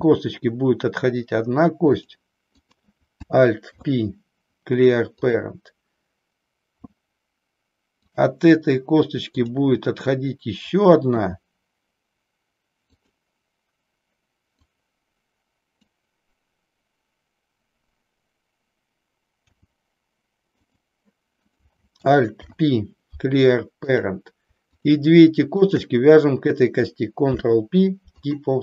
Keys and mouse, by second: 2.1 click, 2.5 click, 3.7 alt+p, 8.0 click, 13.0 click, 14.6-16.0 drag, 19.4 g, 21.5 click, 22.2 alt+p, 24.7 click, 25.6 shift+click, 27.2 ctrl+p.